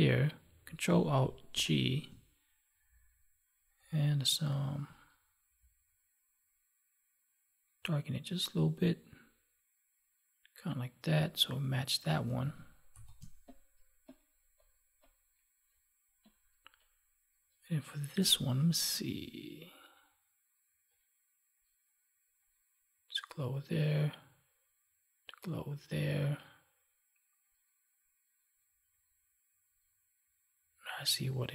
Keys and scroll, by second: 1.4 ctrl+alt+g, 12.3 ctrl+s, 13.1 space.